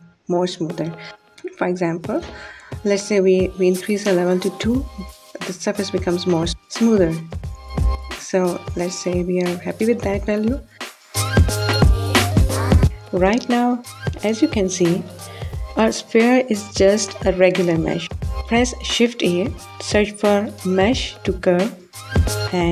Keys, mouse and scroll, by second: 6.6 click, 17.3 shift+a.